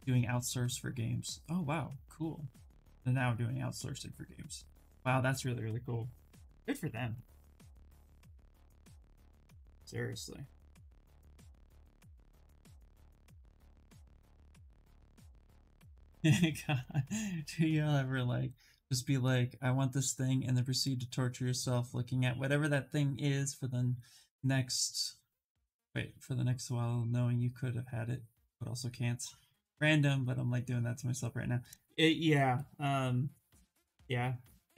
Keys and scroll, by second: 8.1 ctrl+z.